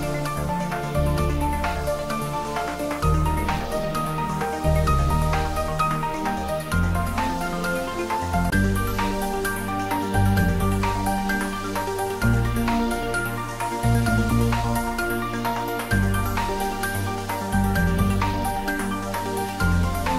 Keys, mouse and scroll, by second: 0.7-3.3 middle drag, 3.4 scroll up 1, 4.2 click, 4.7-5.6 middle drag, 6.3 click, 7.2 g, 7.5 z, 8.3-9.0 scroll up 1, 9.1 click, 9.5-10.4 middle drag, 10.8 click, 11.2-11.5 scroll up 1, 11.5-15.0 middle drag, 15.3-17.2 scroll down 1.